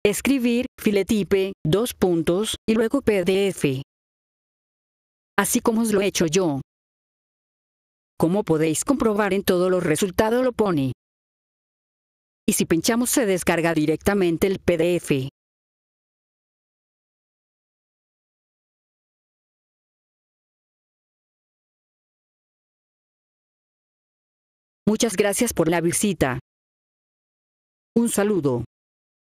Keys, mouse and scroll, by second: 1.0 click, 3.1 click, 5.3 click, 6.7-7.5 scroll down 4, 7.3 middle click, 7.5-8.9 scroll up 2, 8.9-10.0 scroll down 3, 11.9-12.5 scroll down 3, 14.4 click, 19.9 scroll down 2, 20.8-23.8 scroll down 22, 24.4 F4, 24.8 click.